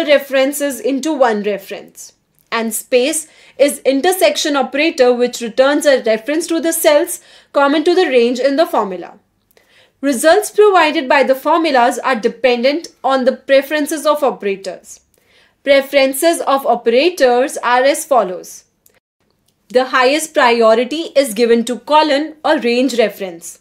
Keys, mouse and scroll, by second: 1.1 Right, 1.4 Right, 2.2 BackSpace, 2.9 ,, 6.9 Return, 8.8 click, 9.6 click, 10.1 click, 16.3 Return, 18.2 click, 19.1 click.